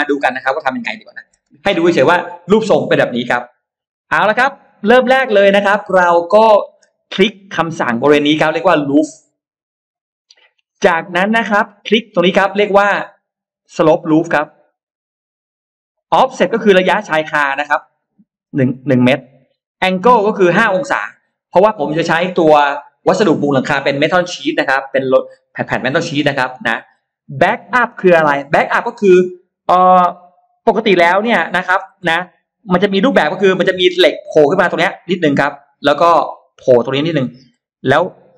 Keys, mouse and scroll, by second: 4.2 shift+right click, 4.8 scroll down 1, 5.1 middle click, 5.6 scroll up 1, 5.8 middle click, 9.2 click, 10.5-11.5 drag, 14.6 click, 18.4 click, 19.6 click, 31.6 shift+x, 32.7-35.2 drag, 36.0-37.4 drag, 38.0-38.3 drag.